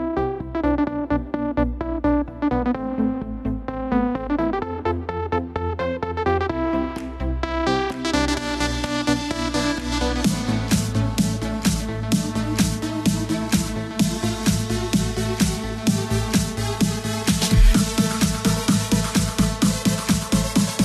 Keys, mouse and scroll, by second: 0.5 a, 2.1 shift+d, 6.0-7.8 drag, 7.8 Tab, 8.9 Tab, 10.3-11.8 drag, 11.8 l, 13.6 h, 14.5-16.0 drag, 16.0 l, 18.3 r.